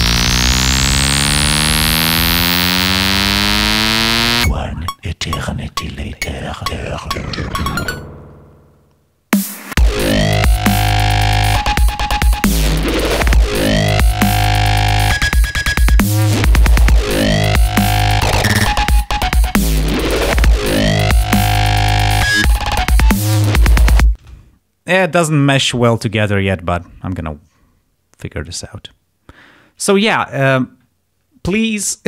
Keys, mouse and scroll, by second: 7.2-7.6 scroll down 2, 8.1-9.3 scroll down 3, 9.6 scroll down 1, 10.5-11.0 scroll down 1, 11.4 scroll down 1, 12.2 scroll down 1, 13.3 scroll up 1, 13.9 click, 14.8-15.3 scroll up 2, 16.4 click, 20.2 ctrl+scroll up 2, 24.1 space.